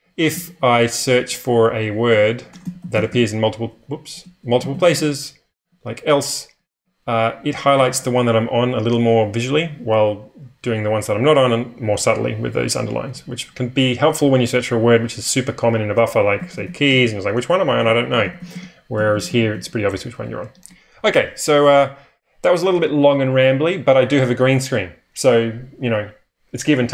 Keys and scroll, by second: 0.0-7.8 typing, 9.6-10.0 typing, 12.7-13.1 typing, 15.7-20.0 typing.